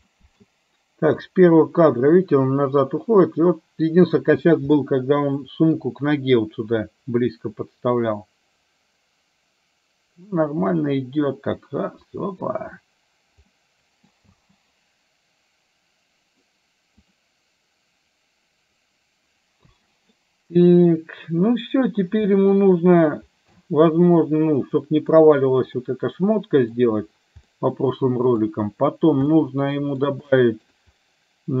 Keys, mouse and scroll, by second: 0.1 middle click, 1.4-4.2 drag, 4.8-5.9 middle drag, 7.0-12.6 drag, 13.6 middle click, 14.4 space, 17.1 click, 19.6 space, 20.2 middle click, 22.4 middle click, 23.6 middle click, 24.7 middle click, 26.0 middle click, 27.5 middle click, 29.5 middle click, 30.5 shift+middle click.